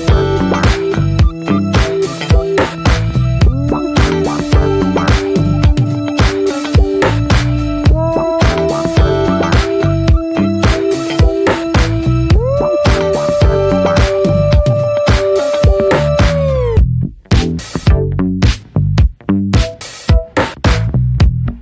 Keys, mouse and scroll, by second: 0.5 shift+middle click, 1.4-2.2 scroll up 3, 2.2 click, 2.8-3.9 middle drag, 5.9 click, 6.1 scroll down 2, 6.2 middle click, 7.2 ctrl+z, 7.7 click, 8.5 alt+scroll up 1, 8.5-10.7 shift+middle drag, 10.7-14.0 drag, 14.0 scroll down 1, 14.1 middle click, 14.3 scroll up 1, 14.4-16.0 middle drag, 16.0-16.3 scroll up 2, 16.3 shift+middle click, 16.5-17.0 scroll down 3, 16.7 middle click, 17.0 middle click, 17.4-18.5 middle drag, 18.5 click.